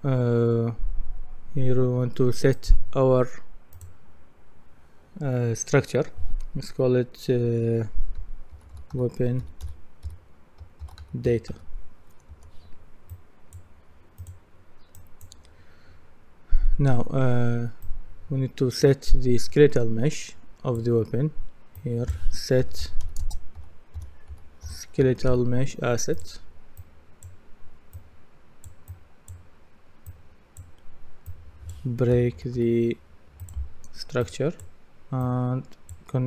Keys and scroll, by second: 8.3-12.0 typing, 12.3 Return, 22.4-25.5 typing, 31.9-33.0 typing.